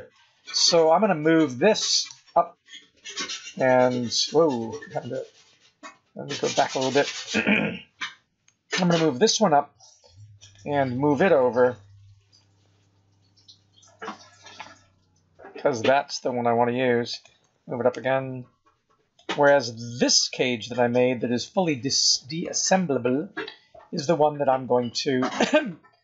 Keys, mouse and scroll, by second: 2.0 g, 6.2-6.8 scroll down 6, 7.6 KP_1, 8.7 g, 11.5 g, 17.4 g, 19.7 scroll up 4, 21.4 click.